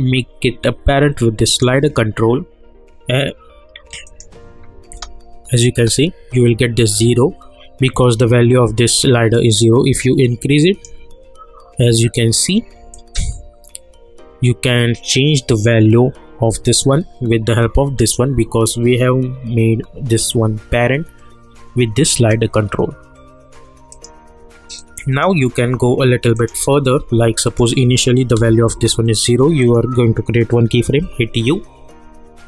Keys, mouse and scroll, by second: 4.9 space, 9.3-18.9 drag, 23.9-26.3 drag, 28.7 Return, 29.6 click, 31.0 u.